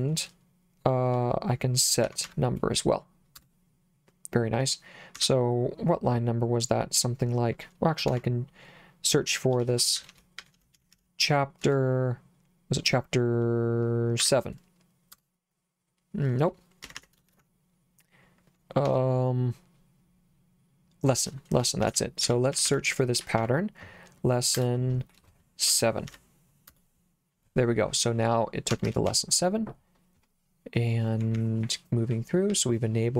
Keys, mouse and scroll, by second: 1.8-2.7 typing, 3.4 Return, 5.2 Escape, 8.1 /, 9.4-11.6 typing, 14.2 7, 15.1 Return, 16.9 Escape, 17.3 shift+;, 18.9 /, 21.6-26.1 typing, 26.7 Return, 28.7 Escape, 29.1 j, 31.4 j, 32.5 j.